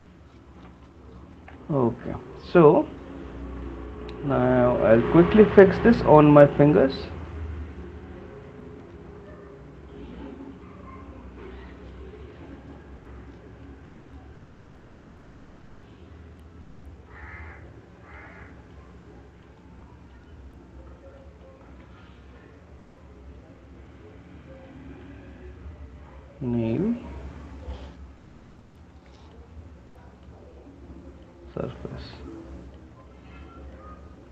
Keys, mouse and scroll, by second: 3.8 click, 6.0 right click, 7.4 click, 9.5 click, 11.9 click, 13.8 shift+click, 16.5 click, 18.3 click, 19.5 click, 21.2 click, 22.2 shift+click, 24.7 click, 29.5 shift+click, 31.3 click, 33.7 shift+click.